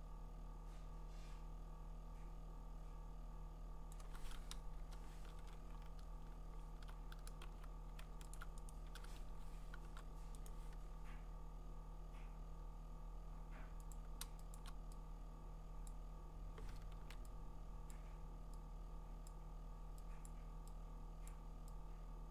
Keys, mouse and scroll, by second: 3.9 click, 4.7 BackSpace, 5.4 ctrl+d, 5.8-7.5 scroll, 7.5 b, 8.4 alt+click, 8.7 right click, 9.2 Escape, 10.5 right click, 13.9 click, 14.6 click, 15.9 click, 17.0 ctrl+z, 17.9 click, 19.3 click, 20.3 click, 21.3 click.